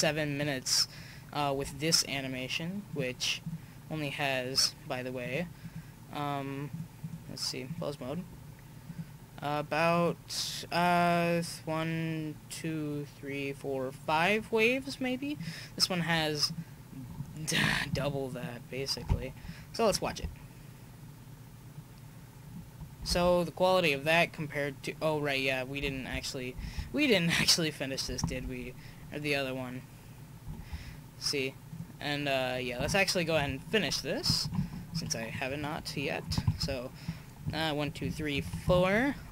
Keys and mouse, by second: 2.9-7.3 right drag, 6.7 click, 7.5-8.8 drag, 8.8-9.9 middle drag, 9.9-11.8 right drag, 15.3-17.1 drag, 16.5-19.5 right drag, 19.5 click, 20.0 right click, 20.0 alt+a, 23.2 alt+a, 23.9-24.3 drag, 25.9 alt+a, 26.7 alt+a, 28.3 alt+a, 30.6 alt+a, 31.7-34.2 drag, 33.4 KP_1, 34.9 KP_5, 36.3 Right, 36.4 Right.